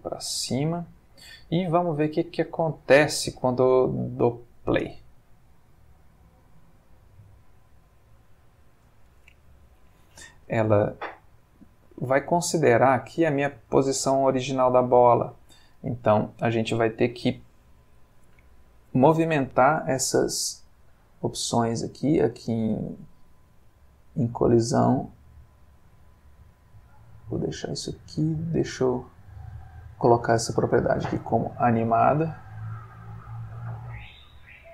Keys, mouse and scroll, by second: 0.5 click, 1.4 middle click, 4.7 space, 15.1 Escape, 16.0 click, 17.5-19.2 middle drag, 21.2-22.5 middle drag, 22.6-23.8 middle drag, 26.9 click, 29.4 click, 32.2 space.